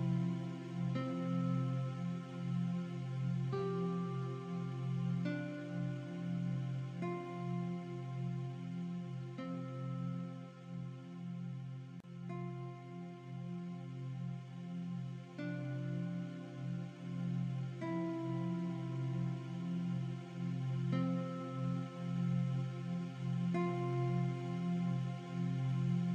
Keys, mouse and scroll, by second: 1.9 click, 2.9 click, 3.1 v, 3.2 click, 3.5 alt+shift+scroll down 1, 4.2 scroll up 1, 4.7-5.4 alt+shift+scroll up 3, 6.2 alt+shift+scroll down 1, 6.5 click, 7.8 click, 8.9 alt+shift+scroll up 1, 9.4 click, 9.5 ctrl+a, 9.7-11.0 typing, 11.2 click, 14.2 alt+Right, 14.7 Left, 14.9 Down, 15.7 click, 17.7 click, 20.1 click, 20.3 alt+shift+scroll down 2, 21.3 click, 23.6 scroll up 1, 24.1 t, 25.8 click.